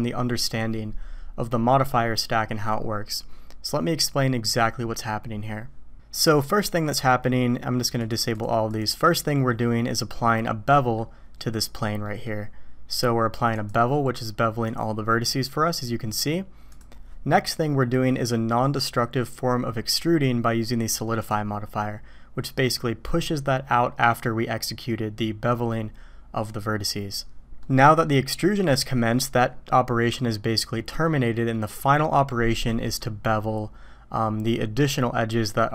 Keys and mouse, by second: 6.4 middle click, 8.0 right click, 8.3 right click, 8.7-10.3 right drag, 10.3-11.0 middle drag, 12.0 click, 13.5 click, 14.7 drag, 16.7 click, 21.2 middle click, 27.6 middle click, 32.8 middle click.